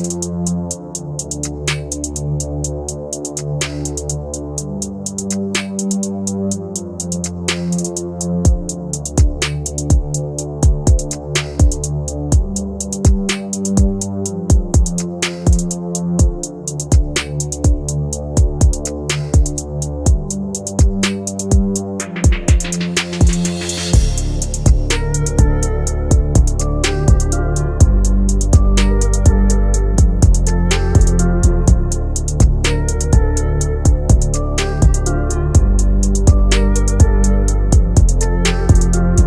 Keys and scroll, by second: 11.4 F3, 24.0 shift+F2, 24.3 Escape, 26.5 F4, 31.5 ctrl+g, 36.0 shift+Page_Up, 36.8 shift+F2, 37.1 Escape, 37.4 F3, 37.9 Escape.